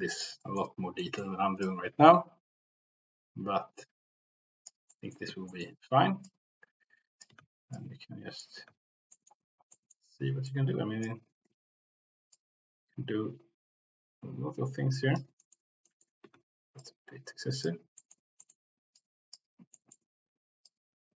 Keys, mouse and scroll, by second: 0.4 middle click, 1.0 middle click, 1.6-4.7 drag, 4.9 middle click, 5.5 shift+middle click, 6.1 click, 7.6 ctrl+z, 7.7 click, 9.1 ctrl+z, 9.1 middle click, 9.7 middle click, 10.4 click, 11.6 ctrl+z, 12.3-15.1 drag, 14.5 c, 15.3 middle click, 15.8 middle click, 16.3 ctrl+z, 16.7 click, 18.0 middle click, 18.4 middle click, 18.9 click, 19.7 middle click, 20.6 click.